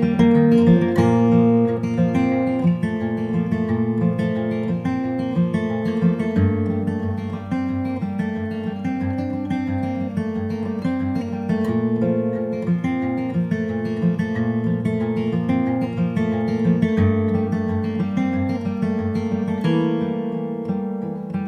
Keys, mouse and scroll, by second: 0.0 Tab, 0.2 right click, 0.8 g, 3.1 right click, 3.6 g, 4.6 middle click, 5.3 middle click, 5.7 Tab, 6.0-7.4 drag, 6.4 p, 7.4 Tab, 7.6 click, 7.9 g, 8.4 space, 9.1 ctrl+s, 9.5-10.6 drag, 10.6 middle click, 11.3 Tab, 11.8 ctrl+r, 12.8 KP_0, 13.6 click, 15.4 s, 16.5 middle click, 17.4 click, 17.6 right click, 18.3 e, 20.0-21.0 middle drag, 21.0 right click, 21.2 click.